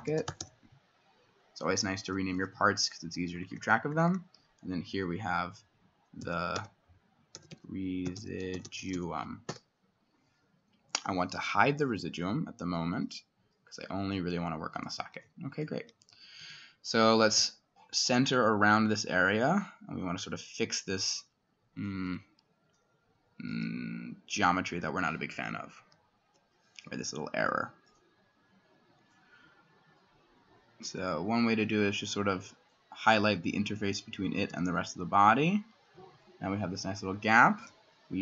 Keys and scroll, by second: 0.0-2.7 typing, 6.2-10.4 typing, 9.5 Return, 12.8-13.5 typing, 15.0-19.6 typing, 15.8 Escape, 20.7-21.4 typing, 21.9 Escape, 23.5 s, 25.3-26.3 [, 28.2 typing, 34.5 x, 36.6 Escape, 37.6 i.